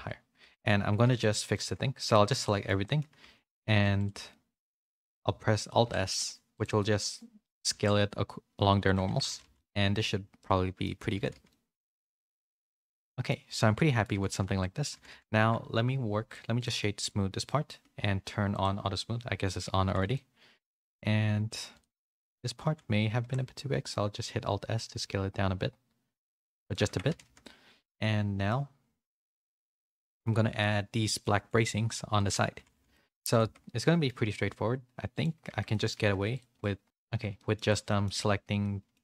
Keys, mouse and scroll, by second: 0.4 3, 1.0 a, 1.5 middle click, 2.1 z, 2.4 shift+middle click, 2.8 shift+middle click, 3.2 3, 4.2 middle click, 5.2 z, 5.8 alt+s, 6.7 middle click, 7.9 alt+s, 9.0 Tab, 9.2 a, 9.4 a, 9.5 middle click, 10.3 middle click, 11.3 a, 11.4 middle click, 12.1 shift+middle click, 12.5 middle click, 13.4 click, 13.7 middle click, 14.1 a, 14.2 a, 14.5 middle click, 14.9 a, 15.1 a, 16.6 right click, 17.4 middle click, 18.5 click, 19.4 click, 20.0 a, 20.1-21.4 middle drag, 21.9 middle click, 22.2 Tab, 22.6 a, 23.2 alt+s, 26.8 Tab, 27.0 a, 27.2 a, 27.4-28.4 middle drag, 29.0 middle click, 29.6 a, 30.0 shift+middle click, 31.2 middle click, 32.1 shift+middle click, 32.5 a, 32.7 a, 32.9 shift+middle click, 33.2 click, 33.4 Tab, 33.8 middle click, 34.1 3, 35.1 click, 35.4 Tab, 35.6 middle click, 35.9 a, 36.1 a, 36.3 click, 36.5 middle click, 37.1 Tab, 37.3 middle click, 37.8 Tab, 37.8 middle click, 38.5 middle click.